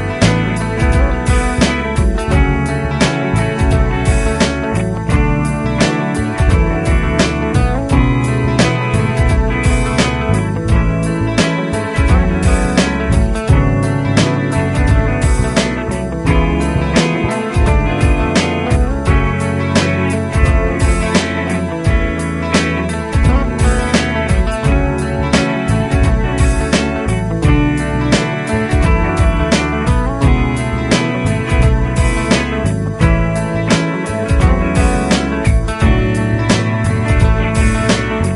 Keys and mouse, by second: 17.3-19.6 typing, 22.2 typing, 30.2 double click.